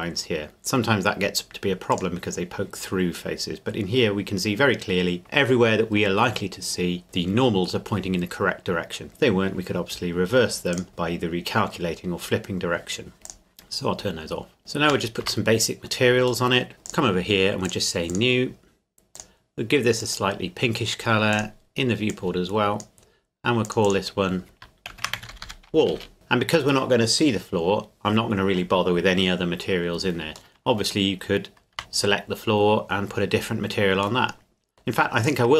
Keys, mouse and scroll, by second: 3.3 middle click, 10.7 click, 13.3 click, 14.6 middle click, 15.2 Tab, 16.5 middle click, 16.9 click, 24.9-25.4 typing, 25.9 Return, 26.1 Tab, 30.5 middle click, 31.7 Tab, 34.2 middle click, 35.3 right click.